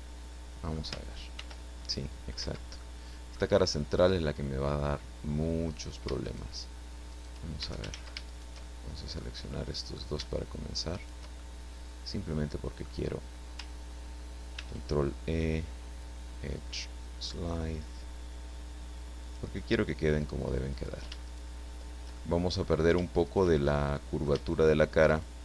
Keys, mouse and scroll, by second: 1.4 ctrl+r, 2.4 Escape, 2.5 middle click, 3.6-4.8 middle drag, 5.7 right click, 6.2 shift+right click, 7.1 shift+right click, 7.9 ctrl+shift+z, 8.2 ctrl+shift+right click, 8.8 ctrl+shift+middle click, 9.5 middle click, 10.9 shift+right click, 11.5-13.0 shift+middle drag, 14.6 ctrl+e, 17.2 click, 19.2 click, 20.7 right click, 21.2 shift+right click, 22.1 shift+middle click, 23.2 shift+right click, 23.6 shift+middle click, 25.1 shift+right click.